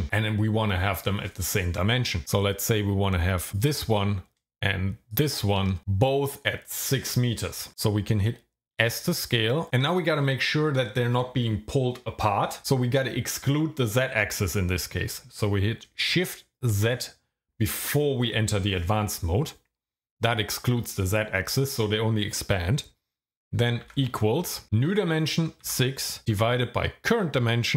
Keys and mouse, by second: 8.7 s, 16.7 shift+z, 23.9 =, 25.7 KP_6.